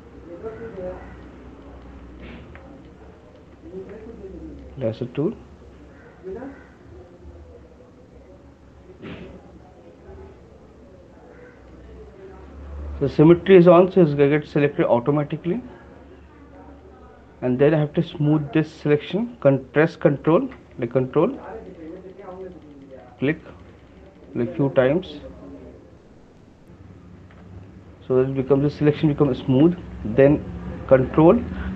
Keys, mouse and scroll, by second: 0.8 click, 1.8 click, 2.5 alt+click, 3.5 shift+click, 11.7 ctrl+click, 17.4 right click, 21.7 ctrl+click, 22.1 ctrl+click, 22.2 ctrl+click, 22.5 ctrl+click, 22.9 ctrl+click, 23.3 ctrl+click, 23.9 ctrl+click, 24.0 ctrl+click, 24.2 ctrl+click, 24.7 ctrl+click, 29.5 click, 29.6 alt+click.